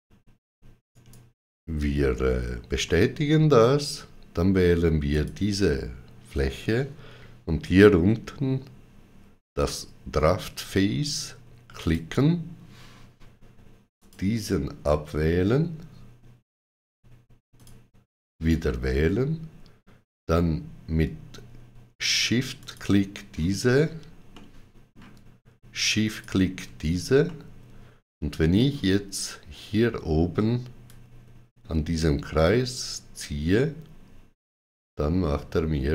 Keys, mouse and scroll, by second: 0.8 right click, 2.7 middle click, 4.9 click, 11.6 click, 13.8 click, 17.4 click, 20.8 click, 22.4 shift+click, 24.2 middle click, 25.9 shift+click, 27.1 middle click, 30.7 shift+click.